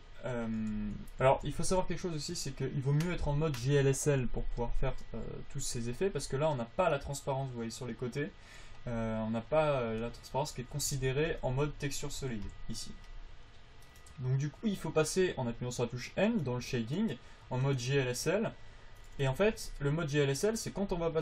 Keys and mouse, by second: 1.1 alt+z, 1.6 alt+z, 11.2 alt+z, 11.6 alt+z, 12.5 n, 16.6-19.8 drag, 19.8 alt+z, 21.1-21.2 drag.